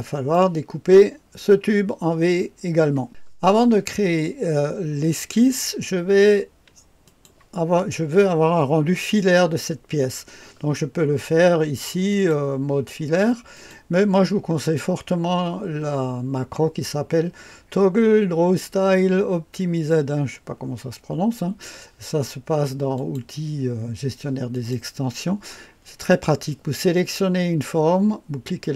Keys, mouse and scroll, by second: 0.0 right click, 3.1 click, 7.0 click, 12.1 click, 13.5 click, 23.0 click, 24.5 click, 28.6 click.